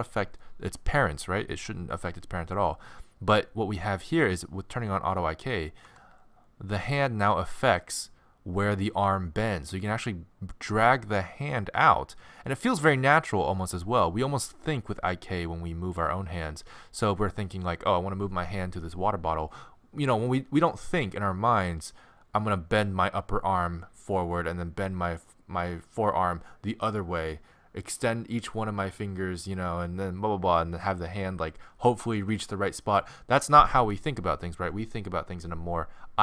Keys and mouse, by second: 5.9 g.